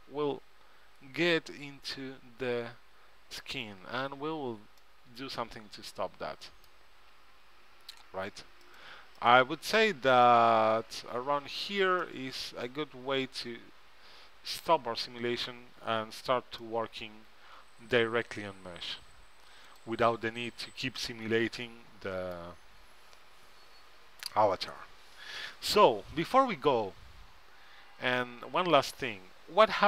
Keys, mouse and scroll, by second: 4.9-6.5 middle drag, 8.8-11.1 drag, 10.4-12.2 right drag, 12.2-14.1 middle drag, 16.8 middle click, 21.2-22.9 middle drag, 29.0-29.8 middle drag.